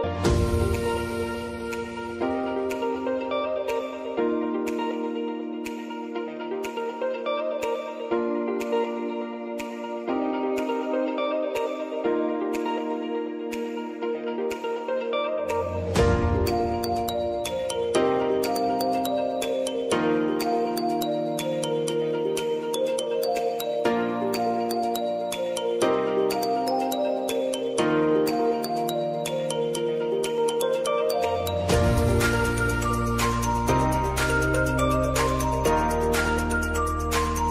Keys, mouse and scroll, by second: 5.0 click, 5.4 space, 7.1 click, 8.2 space, 9.6-10.9 drag, 10.9 r, 13.8 alt+click, 14.6-15.5 typing, 16.6 Return, 17.5-18.9 typing, 19.7 Right, 20.7 shift+=, 22.6 shift+8, 23.7-24.6 typing, 24.7 Return, 25.9 click, 26.9 space, 28.2 click, 28.8 ctrl+d, 33.7 click, 34.0 space, 35.8 click, 37.0 Page_Down.